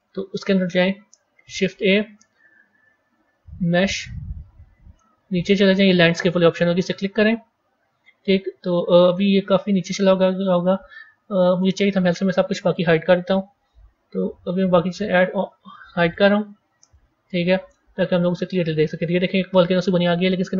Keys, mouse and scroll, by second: 1.3 shift+a, 8.8-10.3 scroll up 9, 10.3 scroll up 1, 10.3-12.3 middle drag, 12.3-13.1 scroll down 3, 13.1-14.1 scroll down 1, 14.1 click, 14.8 click, 16.0 click, 16.7 click, 17.9-18.8 scroll up 14, 19.9 click.